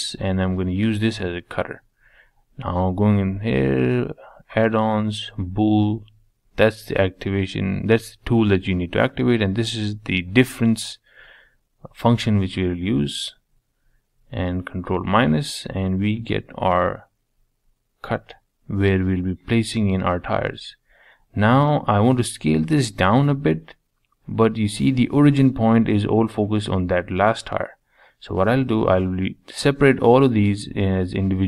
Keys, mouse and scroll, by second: 0.3-2.3 drag, 10.4-10.9 middle drag, 10.9 click, 11.4 click, 12.2 shift+click, 13.5 ctrl+KP_Subtract, 14.8 click, 15.5 h, 16.0-19.0 middle drag, 19.0 click, 20.8 Tab, 21.2-22.6 scroll up 1, 22.6 alt+a, 23.5 l, 23.9 l, 24.3 l, 26.1 p, 28.2 Tab, 28.6 scroll down 1, 28.8 middle click, 29.7-31.4 right drag.